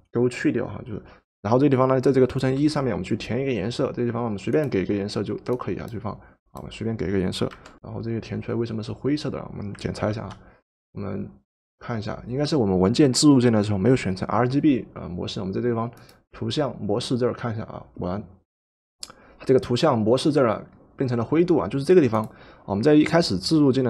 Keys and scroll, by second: 7.5 alt+Delete, 10.1 ctrl+d.